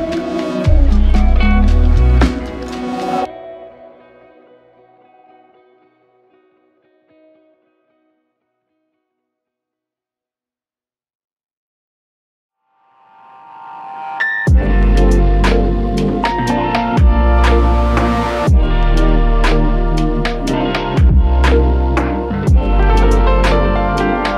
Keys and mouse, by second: 4.4 double click, 6.5 ctrl+click, 8.6 ctrl+click, 11.9 ctrl+click, 12.1 shift+click, 16.7 ctrl+click, 19.1 ctrl+click, 22.0 double click, 22.6 double click, 22.7 alt+click.